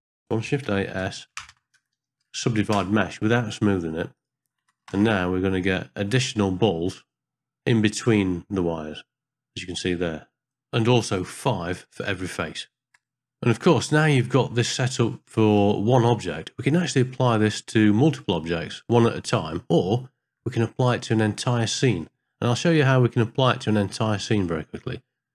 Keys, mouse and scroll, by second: 0.6 shift+a, 5.0 ctrl+space.